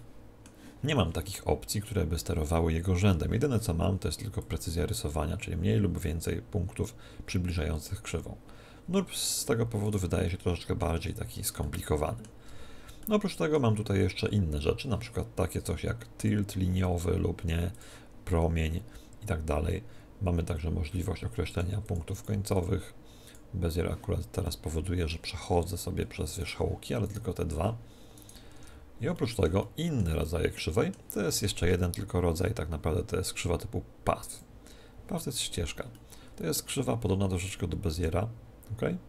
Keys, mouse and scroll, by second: 4.4-6.3 drag, 9.8-11.8 right drag, 10.2-14.9 middle drag, 10.9 Tab, 16.2-19.6 drag, 21.5-25.0 drag, 24.4-26.2 middle drag, 26.4-29.8 right drag, 28.5 Tab, 29.1-32.0 middle drag, 31.4 shift+a, 35.1-37.6 middle drag, 36.6 Tab, 37.4-39.0 right drag, 38.0 g.